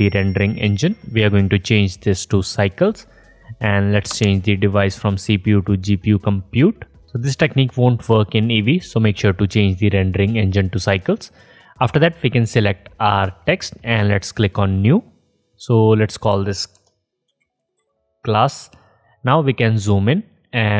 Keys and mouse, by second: 17.8 s.